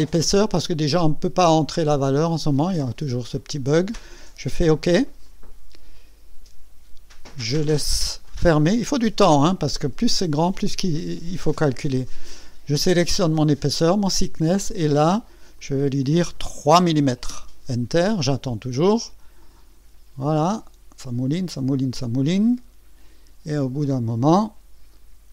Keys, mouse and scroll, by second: 5.2 click, 12.4 click, 15.6 click, 16.8 KP_3, 17.3 KP_Enter.